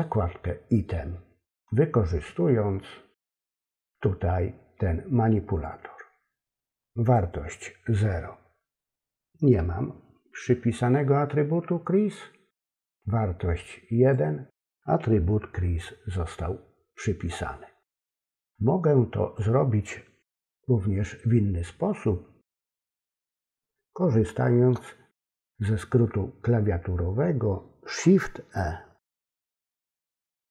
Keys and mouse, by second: 5.6-7.1 drag, 13.0-14.1 drag, 18.3-19.4 drag, 29.4 shift+e.